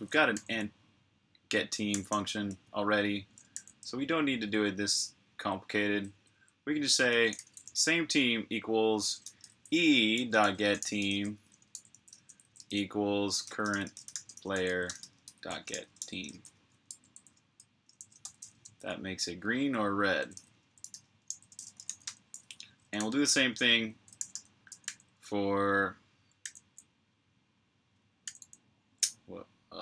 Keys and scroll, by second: 0.1 super+j, 1.8 typing, 3.4 super+j, 4.4-5.1 typing, 6.1-7.7 typing, 9.7-11.5 typing, 14.2-15.2 typing, 22.8 super+j, 24.0 g, 24.7 super+j.